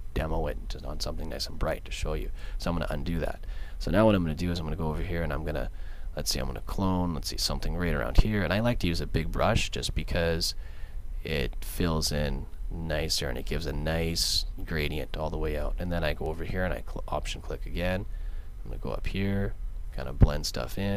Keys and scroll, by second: 2.4 super+z.